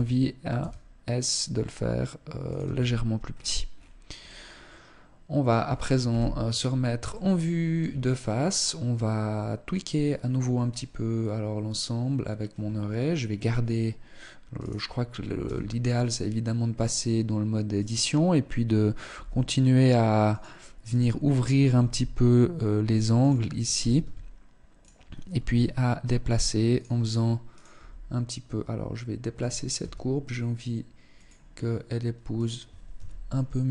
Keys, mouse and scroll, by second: 0.1 s, 2.1 click, 2.3 Tab, 2.8-3.7 scroll down 8, 3.7 middle click, 5.7 KP_1, 6.7 shift+middle click, 7.6 scroll down 1, 8.3-8.6 scroll up 1, 14.3 right click, 15.1 Tab, 17.3 right click, 18.7 g, 20.4 right click, 21.5 g, 23.1 right click, 23.7 s, 24.9 g, 27.1 right click, 27.3 g, 29.3 s, 31.9 right click, 32.5 z.